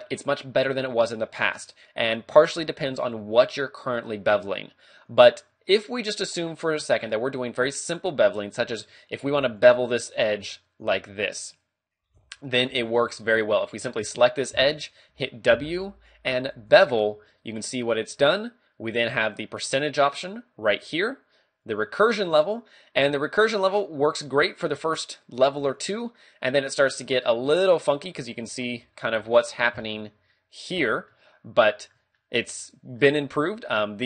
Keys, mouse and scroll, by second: 4.9 scroll up 2, 5.5-6.5 scroll down 2, 9.4 d, 9.6 click, 10.8-13.7 typing, 11.6 right click, 12.9 right click, 15.1 w, 19.1 click, 21.7 click, 22.3 click, 23.0 click, 24.2 click, 25.8 click, 26.4 click, 26.6 click, 26.8 click, 27.0 click, 27.9 scroll up 5, 28.4-29.1 scroll down 4, 29.3 shift+middle click, 29.8-30.2 scroll up 2, 31.1 ctrl+middle click, 32.3 middle click.